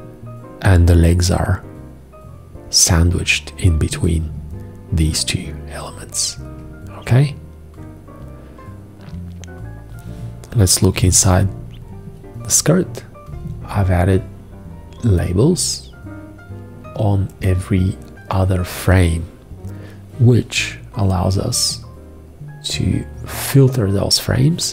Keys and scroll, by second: 10.6 v.